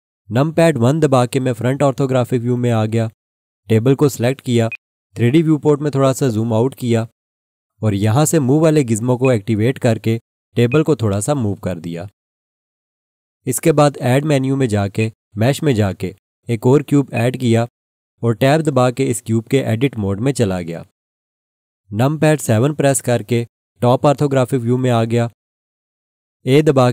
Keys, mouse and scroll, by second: 1.4 1, 4.7 click, 5.8 scroll down 1, 9.2 click, 15.0 click, 19.3 Tab, 22.4 7.